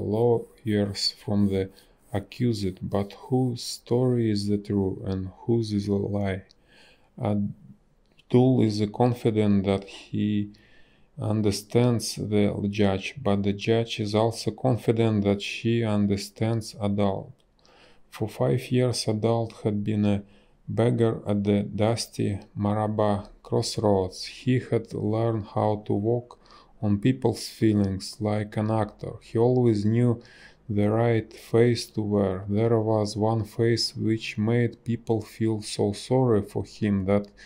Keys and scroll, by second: 2.0 a, 7.4 space, 14.7 space, 18.0 space, 24.9 space, 28.8 space, 30.0 b, 30.6 space, 32.5 ctrl+z, 32.9 ctrl+z, 33.9 space, 36.3 ctrl+shift+a.